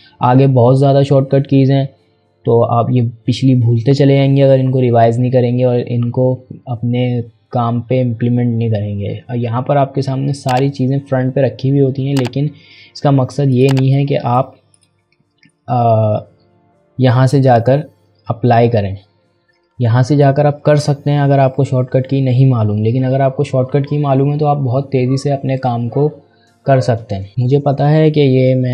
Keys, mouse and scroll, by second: 13.5 click, 19.6-21.4 scroll down 1, 22.9 scroll down 1, 23.6 scroll up 1, 24.2-25.8 scroll down 1, 25.8-27.1 typing, 26.6-27.1 scroll down 1.